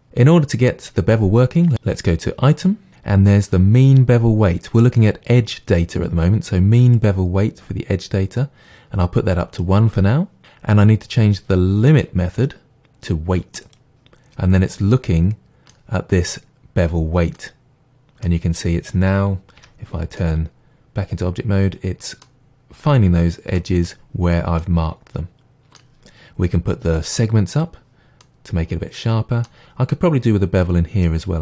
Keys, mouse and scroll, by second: 0.6 click, 7.0-13.7 drag, 14.6-14.9 scroll down 1, 14.9-15.7 middle drag, 19.6 Tab, 20.2-20.8 middle drag, 21.1-23.7 middle drag, 25.1-27.6 middle drag, 27.6 click, 28.2-31.4 middle drag.